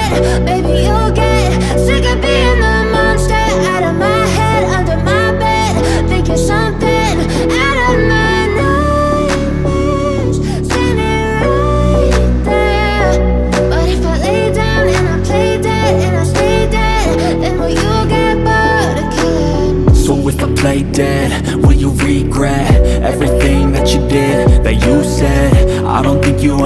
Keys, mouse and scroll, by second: 0.7-6.8 drag, 6.8 right click, 9.4 click, 13.1 click, 14.3 right click, 16.5 click.